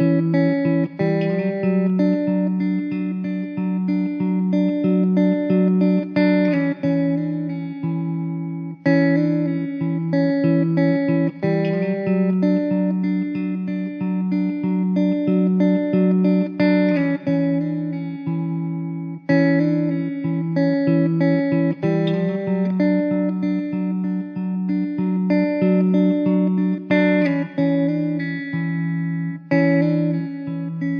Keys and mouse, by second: 6.4 middle click, 7.6 alt+w, 8.2 alt+middle click, 11.7 middle click, 14.9 alt+w, 17.6 middle click, 19.0 1, 21.4 Delete, 22.2 middle click, 23.2 3, 23.8 ctrl+a, 27.2 alt+w, 28.0 middle click.